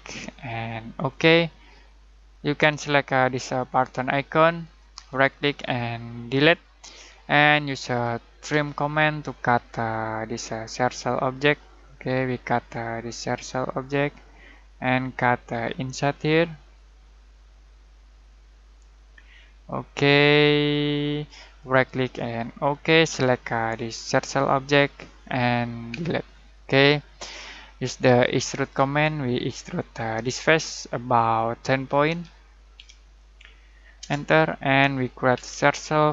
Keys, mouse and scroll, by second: 0.9 click, 4.6 click, 5.0 right click, 6.3 click, 7.5-8.1 middle click, 8.5 t, 9.6-14.9 drag, 21.5 right click, 22.7 click, 25.9 Delete, 27.2-27.9 middle drag, 28.6 click, 32.1-33.2 typing, 34.0 Return, 35.3 c.